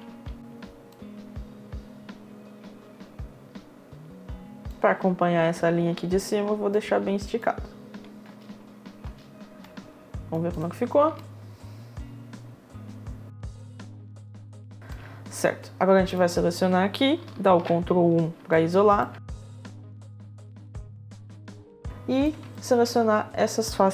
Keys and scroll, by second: 0.1 w, 0.4 space, 7.8 space, 17.7 1.